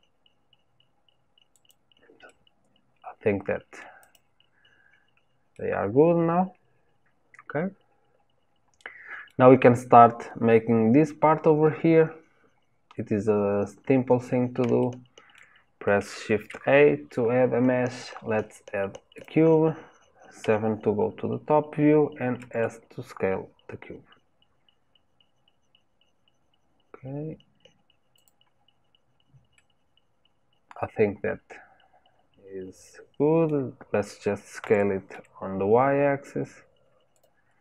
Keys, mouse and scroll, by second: 2.2-4.0 middle drag, 4.0 click, 4.8-5.5 scroll down 1, 5.5-15.3 middle drag, 15.3-16.4 scroll down 1, 16.4 shift+a, 20.4 KP_7, 22.3 s, 29.5-32.5 middle drag, 34.5 s.